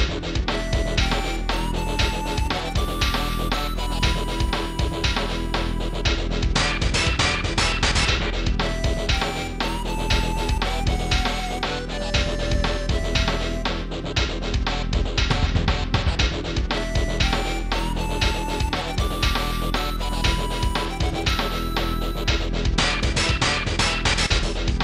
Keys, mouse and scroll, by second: 0.4 a, 3.1 click, 12.4 click, 13.1 a, 14.3 ctrl+s, 14.6 click.